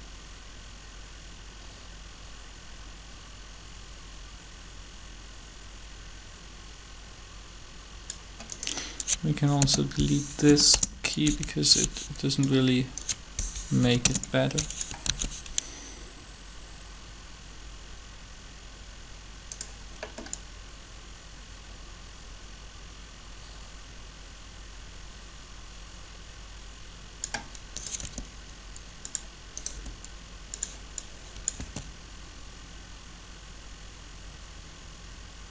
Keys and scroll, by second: 9.5 k, 10.4 Delete, 10.5 Return, 13.7 Delete, 13.9 Return, 15.0 alt+a, 28.0 r, 29.7 r, 31.6 alt+a.